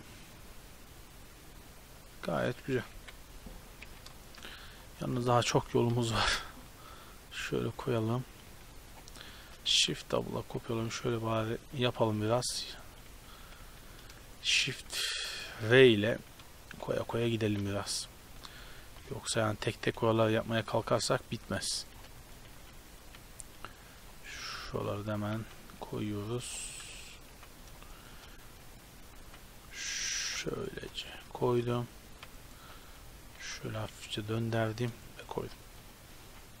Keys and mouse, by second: 2.9 KP_7, 3.9 z, 5.1 shift+d, 7.4 r, 8.5 r, 9.4 shift+d, 10.8-13.8 typing, 14.9-17.5 typing, 18.9-23.1 typing, 19.7 click, 24.5-29.3 typing, 30.7 shift+d, 31.5 g, 32.5 shift+d, 33.1 r, 33.4 g, 33.8 r, 35.4 shift+d, 35.9 r, 36.3 g.